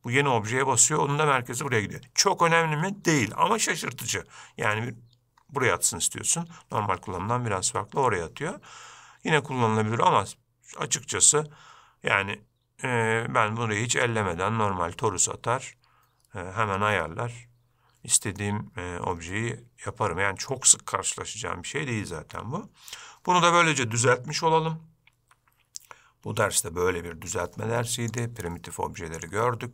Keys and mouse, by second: 4.3-5.0 middle drag, 18.6-20.7 middle drag.